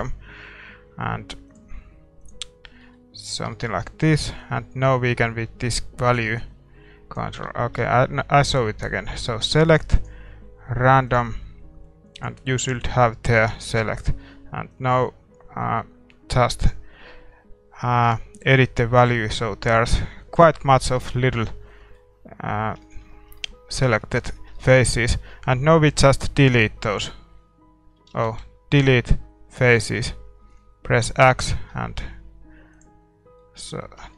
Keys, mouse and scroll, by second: 2.3-3.5 drag, 2.8-5.2 middle drag, 4.5-6.1 drag, 7.6 a, 7.8-9.9 middle drag, 11.2-16.7 drag, 20.7-27.0 middle drag, 27.0 x, 27.4-27.8 scroll down 1, 27.8-32.8 scroll up 1, 28.1 ctrl+z, 33.4-34.1 middle drag, 34.0 Tab.